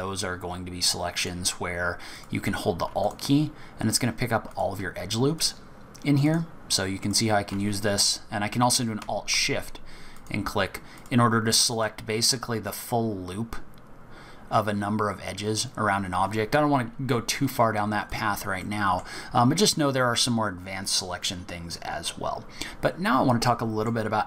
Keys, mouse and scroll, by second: 1.2 click, 2.1 click, 3.0 alt+click, 4.4 click, 5.4 alt+click, 6.2 click, 7.0 alt+click, 10.1 alt+shift+click, 10.9 alt+shift+click, 11.7 alt+shift+click, 18.1 click, 18.6 middle click, 19.4-20.2 scroll down 3, 20.2-20.8 scroll up 1, 23.4 middle click.